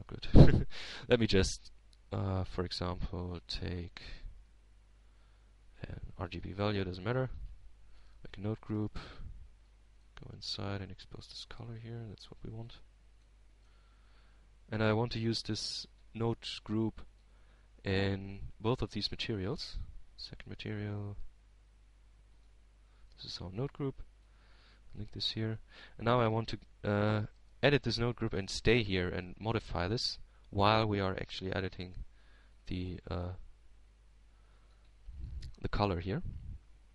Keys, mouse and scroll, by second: 0.2 click, 2.2-3.7 drag, 3.1 x, 3.7 shift+a, 9.8-11.4 drag, 11.7 ctrl+g, 12.5 ctrl+Tab, 13.3-13.7 ctrl+scroll down 1, 13.7 middle click, 15.2 shift+click, 16.3 shift+Tab, 17.0-18.0 shift+middle drag, 18.5-20.0 drag, 20.2-21.3 drag, 22.9 right click, 24.1 shift+a, 26.0 click, 26.8-27.8 drag, 27.9-29.4 drag, 31.1 Tab, 31.7 middle click, 35.2 click, 36.2-36.9 drag.